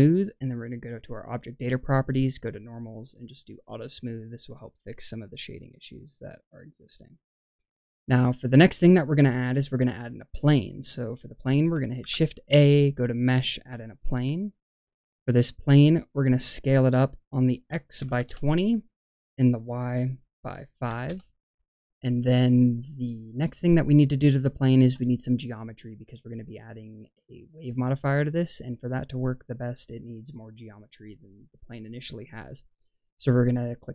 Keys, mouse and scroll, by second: 1.1 click, 2.4-4.3 drag, 4.3-6.0 middle drag, 6.8-7.9 scroll down 2, 7.1-8.6 middle drag, 10.6 middle click, 11.9 shift+a, 15.3 click, 17.3 click, 19.3-21.0 drag.